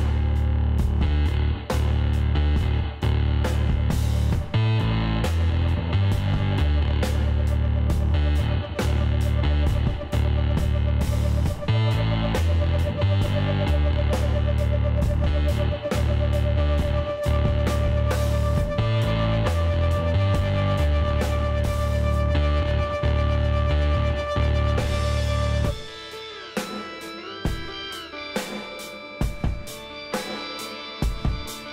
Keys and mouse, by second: 0.2 middle click, 2.3 middle click, 2.8 click, 4.1 click, 4.3-7.9 middle drag, 7.9 click, 8.2-10.7 middle drag, 10.7 click, 11.6-20.5 middle drag, 20.5-22.4 drag, 26.9-28.5 middle drag, 28.5 Tab, 30.6 Tab, 31.2 a, 31.5-31.7 middle drag.